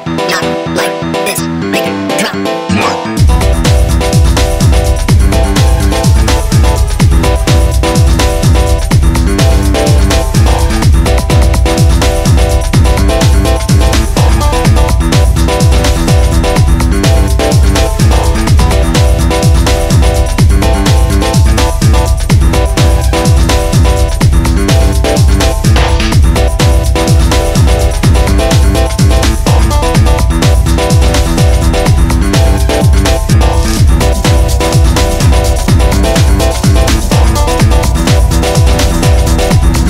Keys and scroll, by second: 6.6 Delete, 7.6 ctrl+z, 12.7 4, 17.3 2, 20.9 4, 25.4 1, 25.8 Return, 26.6 2, 27.0 Return.